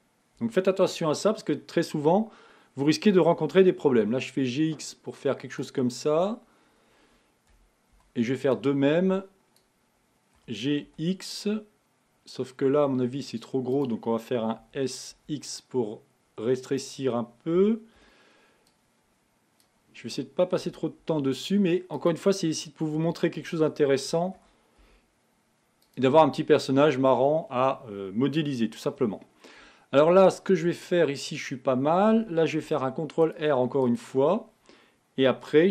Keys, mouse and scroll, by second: 0.5 KP_1, 27.0-29.9 scroll up 2.